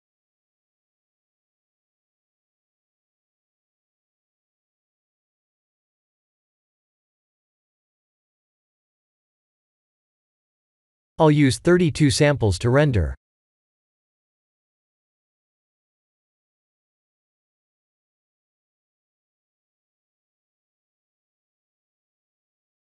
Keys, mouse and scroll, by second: 9.9 click, 20.9 click, 21.8 ctrl+s, 22.6 alt+a.